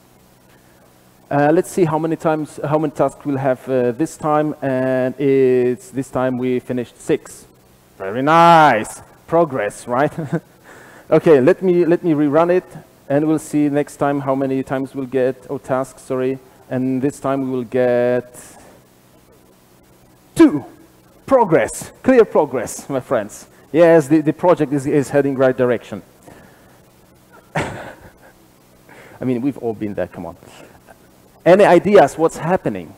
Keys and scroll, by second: 9.6 super+r, 12.9 ctrl+r, 12.9 shift+F10.